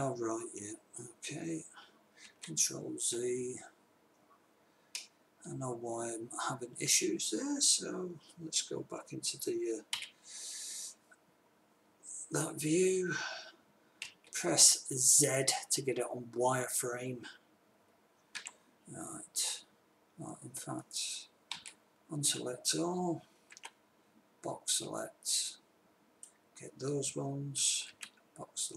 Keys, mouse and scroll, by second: 2.6 ctrl+z, 10.3 KP_3, 14.4 z, 18.9 b, 22.0 a, 23.9 b, 28.3 b.